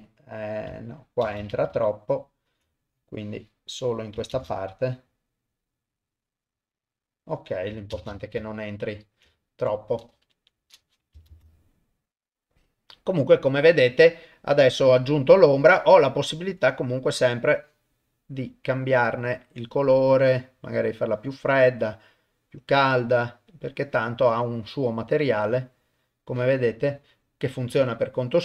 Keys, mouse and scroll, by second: 1.2 shift+space, 1.7 ctrl+z, 3.1 click, 4.3 shift+space, 7.9 shift+space, 8.6 ctrl+click, 8.6 ctrl+middle click, 9.3 shift+click, 9.3 shift+middle click, 10.3 shift+Left, 11.3 shift+space, 14.6 click, 15.7 middle click, 16.6 click.